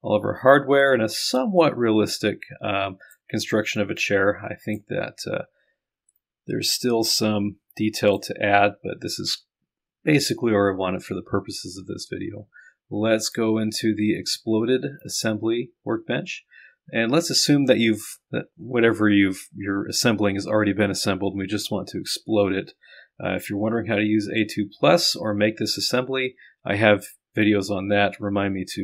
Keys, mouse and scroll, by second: 0.9-3.5 drag, 3.8-4.8 drag, 6.2-8.5 drag, 13.3 click, 15.0 click, 16.5-17.7 scroll down 1.